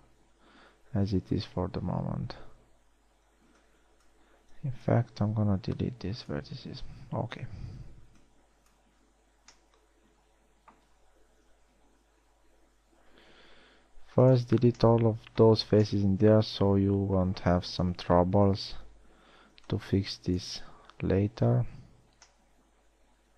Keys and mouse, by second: 1.5 a, 3.7 b, 4.9 b, 5.8 x, 8.5 b, 9.8 z, 12.2 KP_1, 12.7 z, 13.9 x, 15.3 z, 18.4 KP_1, 18.9 z, 19.9 b.